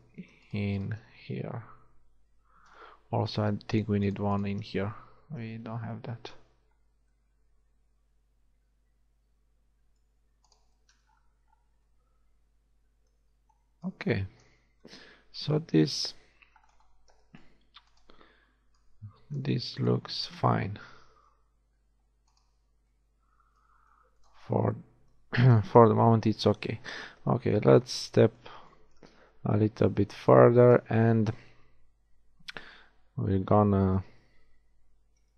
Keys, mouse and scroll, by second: 0.1 z, 1.1 z, 2.3 f, 5.3 f, 5.5 z, 10.5 middle click, 13.9 click, 14.7 a, 18.0-19.3 shift+drag, 21.5 g, 25.7 KP_1, 26.2 z, 27.1 a, 32.7 a, 33.1 a, 33.3 z, 34.0 a, 35.1 a.